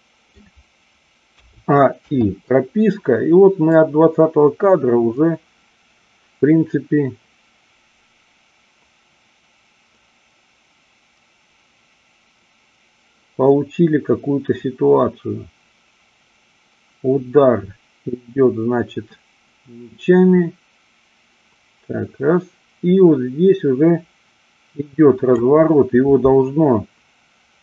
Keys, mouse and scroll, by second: 2.0 i, 3.7-25.4 drag.